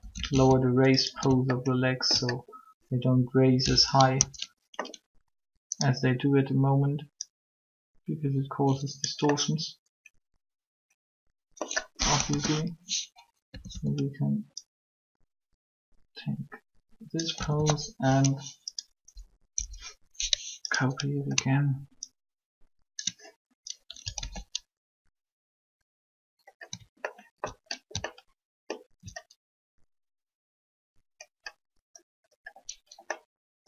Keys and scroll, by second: 4.1 ctrl+3, 12.2 3, 13.4 a, 13.7 a, 17.3 a, 17.4 a, 19.1 Up, 19.6 Up, 24.2 ctrl+alt+a.